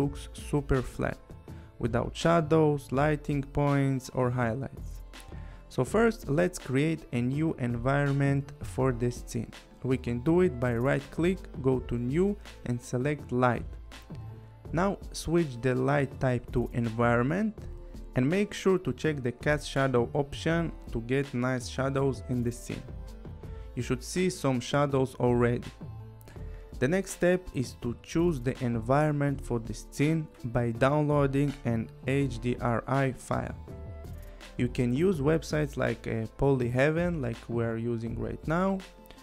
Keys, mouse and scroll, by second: 0.2 click, 1.5 click, 1.8 click, 2.0 scroll, 2.3 click, 2.8 click, 2.9 scroll, 2.9 click, 3.2 click, 3.5 click, 3.7 click, 5.7 click, 6.8 click, 11.7 right click, 14.4 click, 16.6 click, 17.9 click, 21.4 click, 24.1 click, 26.4 click, 28.6 scroll, 29.3 click, 29.8 click, 32.3 click, 34.1 click, 36.5 click, 37.7 click.